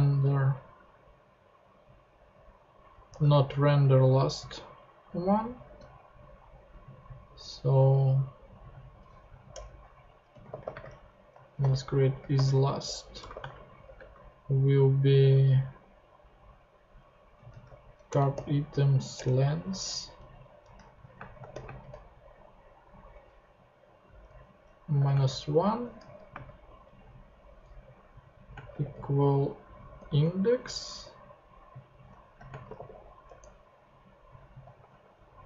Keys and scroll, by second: 9.5 Return, 10.1-13.9 typing, 17.1-18.3 typing, 19.1 Return, 19.7 alt+Return, 19.9 alt+Left, 20.7 alt+super+Left, 20.8 alt+super+Right, 21.1 super+space, 21.5 shift+., 21.6 shift+space, 24.1-26.3 typing, 26.0 Left, 26.6 Right, 27.8-30.2 typing, 32.1-33.2 typing, 34.8 ;.